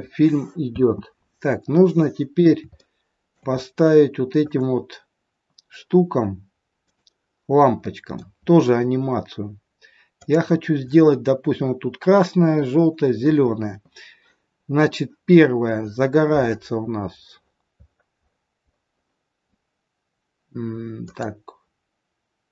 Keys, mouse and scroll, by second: 0.7 space, 1.1-1.7 scroll up 3, 1.7 middle click, 1.7 scroll up 1, 2.8 shift+middle click, 3.5-4.4 scroll up 4, 4.4 click, 6.9 click, 7.9 middle click, 10.2 click, 16.8-19.5 scroll up 23, 19.5-20.9 scroll up 5, 21.1 click.